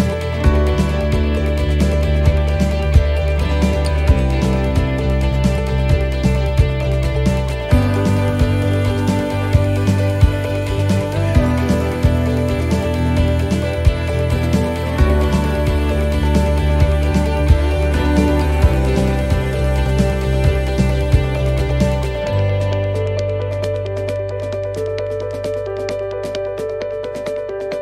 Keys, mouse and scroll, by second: 0.5 middle click, 1.2 middle click, 2.8 right click, 3.7 click, 8.2 ctrl+r, 10.4 click, 12.5 shift+middle click, 13.5 scroll down 1, 14.0 shift+middle click, 15.5 right click, 16.0 c, 18.1 click, 18.6 c.